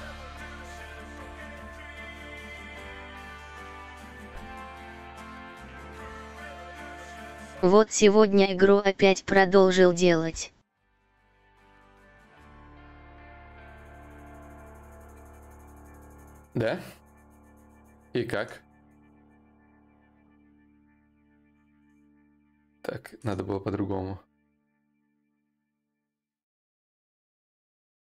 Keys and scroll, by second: 9.2 shift+d, 9.4 shift+d, 9.8 shift+d, 10.2 shift+d, 12.0 shift+d, 13.0 d, 13.5 d, 14.6 shift+d, 21.1 Return.